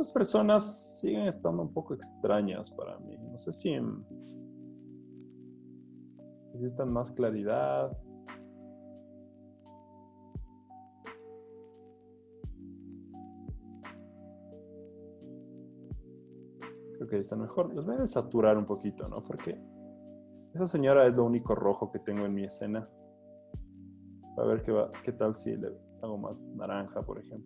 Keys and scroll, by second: 0.9 z, 2.9 super+l, 14.6 z, 15.9 z, 17.8 super+u.